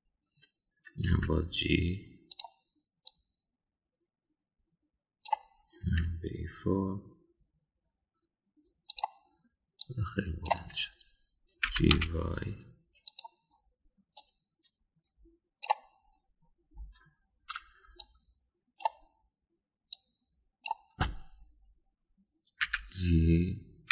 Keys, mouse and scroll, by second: 0.0 click, 2.1 g, 4.1-6.3 drag, 6.8 g, 10.8-11.5 drag, 12.7 g, 15.2-16.7 drag, 19.0-19.9 shift+drag, 20.9-21.6 shift+drag, 23.6 g.